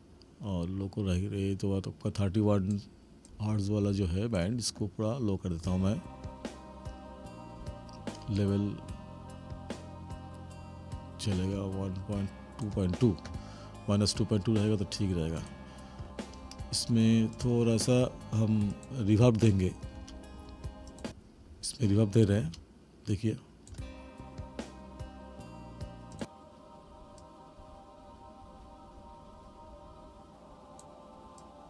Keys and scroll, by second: 5.5 space, 19.9 space, 22.4 space.